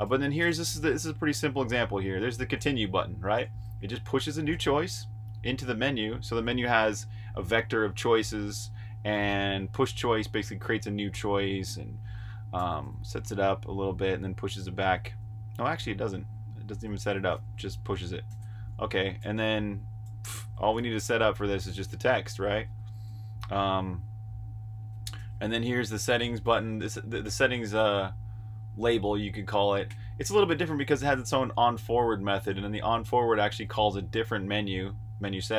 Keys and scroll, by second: 0.0-1.8 typing, 3.3-4.5 typing, 9.4 Escape, 9.6-10.0 typing, 12.3 typing, 13.7-19.1 typing, 17.8 Escape, 22.6 Escape, 23.0-23.8 typing, 25.0-27.2 typing, 29.8 j, 30.9 shift+v, 33.1 Escape, 33.4-34.0 typing.